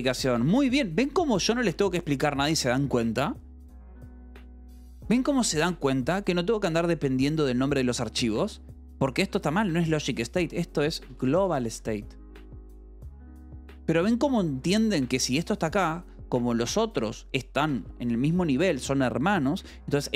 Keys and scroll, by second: 7.1 l, 7.6 h, 8.9-11.9 typing, 14.5 k, 15.4 shift+v, 15.6 Escape, 16.6 j, 16.9 v, 17.5 k, 18.2 Escape, 19.1 shift+v, 19.5 Escape, 20.0 j.